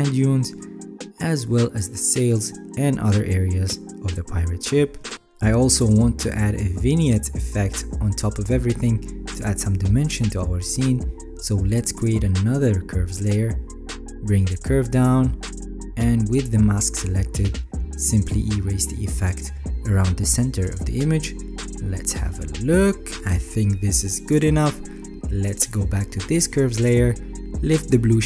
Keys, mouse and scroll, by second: 0.4 alt+scroll down 5, 1.2 alt+right click, 4.1 alt+right click, 6.1-6.9 alt+scroll down 5, 6.9 alt+scroll, 7.0 ctrl+s, 19.9-21.7 alt+right drag.